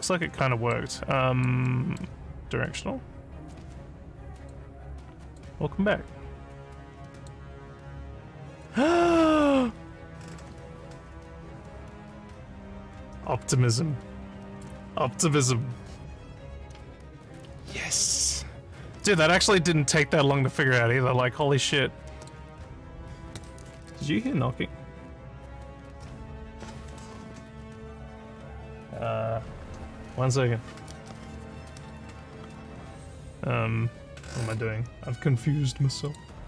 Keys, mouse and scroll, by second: 0.2 alt+middle click, 0.9 alt+click, 1.7 alt+middle click, 3.5-4.5 drag, 5.2 click, 7.2 click, 8.6 alt+click, 9.8 alt+scroll down 4, 19.4-20.0 alt+scroll up 3, 20.3 alt+scroll, 20.4 alt+scroll, 20.7 alt+middle click, 21.7 alt+click, 36.0 click.